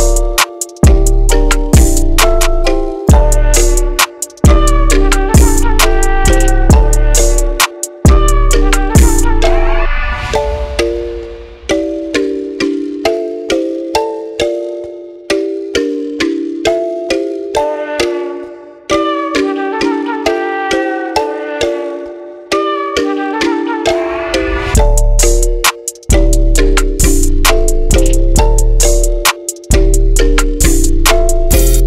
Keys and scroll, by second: 3.8 Escape, 12.0-14.1 typing.